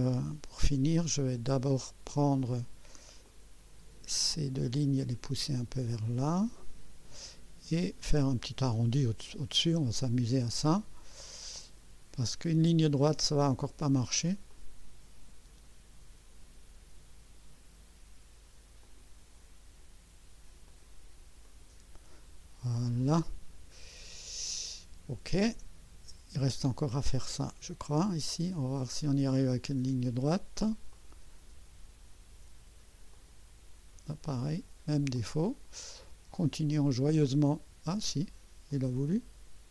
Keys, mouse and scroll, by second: 1.5 middle click, 2.5 middle click, 3.2-7.2 drag, 11.6 click, 14.5 click, 18.8 click, 20.7 click, 21.4 right click, 23.1 scroll up 1, 23.5-23.8 scroll down 1, 28.8 click, 30.9 click, 33.1 click, 35.1 click, 36.3 click, 37.9 scroll up 1, 38.7 right click.